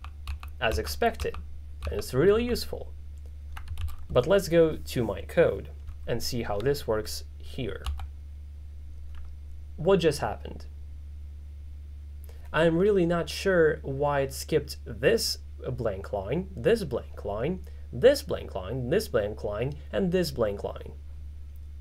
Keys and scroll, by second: 7.9 shift+].